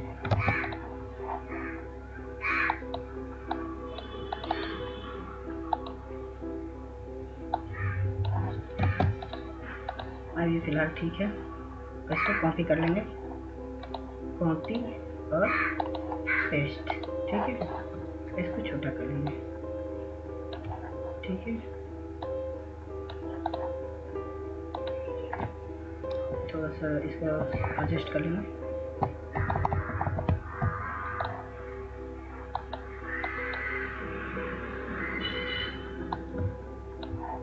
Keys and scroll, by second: 0.8 ctrl+space, 9.2 ctrl+space, 27.2-29.8 Up, 30.3 Up.